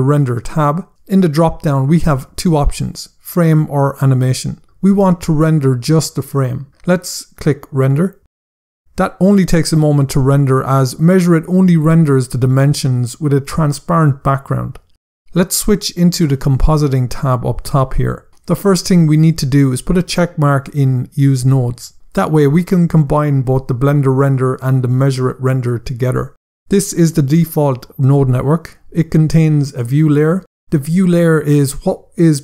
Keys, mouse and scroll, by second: 0.2 scroll down 1, 1.0 click, 6.1 click, 15.5 click, 19.0 click, 32.3 click.